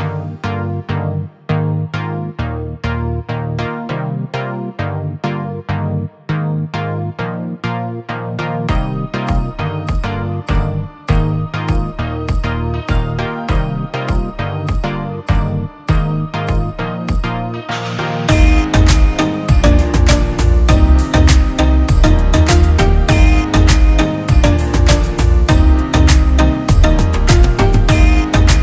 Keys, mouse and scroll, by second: 1.1 Escape, 1.6 click, 2.2 shift+click, 3.9 click, 4.3 Escape, 4.6 click, 5.2 shift+F2, 7.6 click, 8.1 shift+Caps_Lock, 8.8 shift+F11, 11.2 click, 13.7 click, 15.0 Delete, 15.6 Tab, 16.2 shift+Tab, 17.0 Escape, 17.3 F3, 17.6 Escape, 17.8 F2, 18.0 click, 18.8 F8, 19.0 click, 20.2 shift+d, 21.6 BackSpace, 21.8 Caps_Lock, 22.8 shift+d, 24.0 shift+f, 24.8 ctrl+space, 26.3-27.2 click, 27.5 shift+Caps_Lock, 27.7 shift+click, 28.2 c.